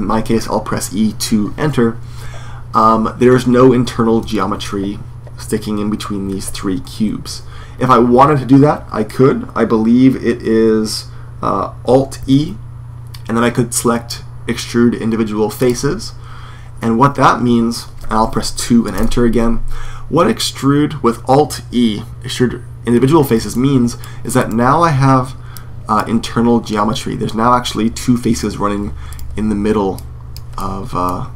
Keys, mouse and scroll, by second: 12.0 alt+e, 23.3-25.3 middle drag, 26.0-28.9 drag, 26.0-27.0 middle drag, 28.9-30.6 right drag, 29.7-31.3 drag, 30.4 middle click.